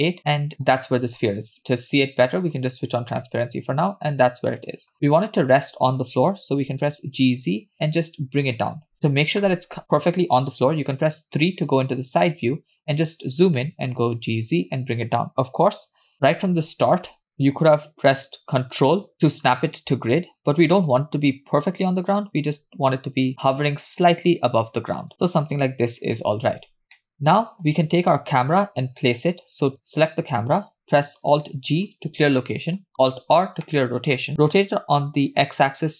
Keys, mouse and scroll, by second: 0.0-1.3 middle drag, 2.6 click, 3.5-5.2 middle drag, 6.3 g, 10.9 KP_3, 12.6 scroll up 4, 13.7 g, 22.1 g, 25.1 g, 25.5-25.9 scroll up 2, 26.2-26.9 scroll down 4, 27.0 middle click, 27.1 scroll down 1, 28.4-28.9 scroll down 1, 29.2-30.2 drag, 31.8 alt+g, 32.0 scroll up 3, 33.0 middle click, 33.0 scroll up 1, 33.8 alt+r, 33.9 middle click, 35.5 r.